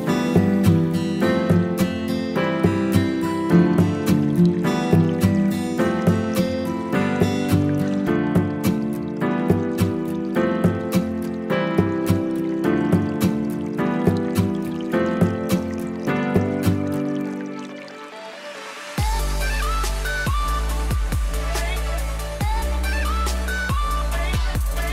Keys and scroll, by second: 11.2 space, 13.9 space, 14.9 space, 17.5 space, 18.1 ctrl+z.